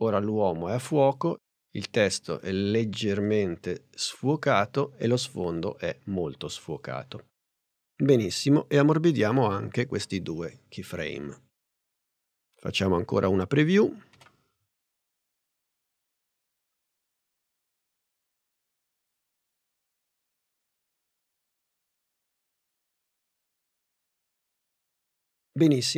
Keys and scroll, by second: 10.4 F9, 14.2 Return.